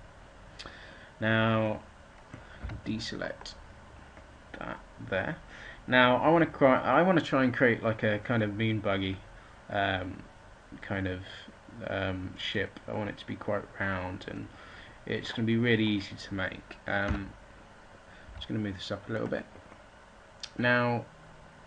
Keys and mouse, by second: 2.4 a, 17.0 a, 18.1 g, 19.1-20.5 drag.